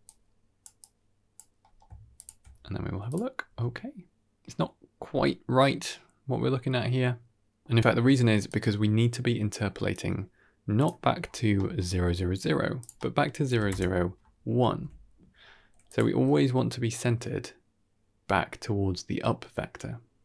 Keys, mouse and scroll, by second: 0.0 drag, 0.7-1.3 drag, 1.5 middle click, 2.1 ctrl+shift+click, 3.0 click, 3.4 g, 7.4 shift+space, 7.9 g, 9.8-10.8 drag, 11.0-11.7 scroll up 3, 11.4 middle click, 12.7 click, 14.6 shift+space, 15.7 click, 16.1 g.